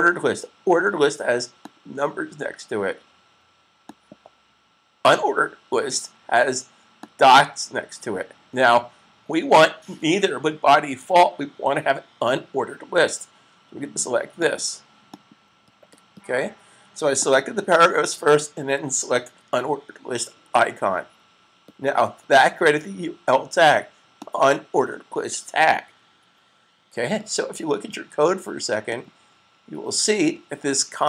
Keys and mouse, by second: 1.6 click, 6.9 click, 14.1 click, 19.1 super+s, 23.9 click, 28.8 click.